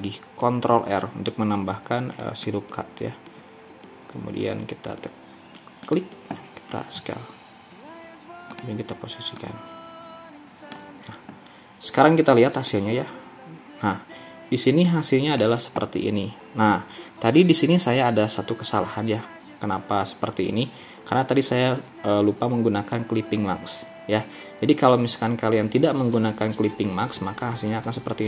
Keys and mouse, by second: 0.6 ctrl+r, 7.1 s, 10.1-12.7 drag, 12.7-15.5 middle drag.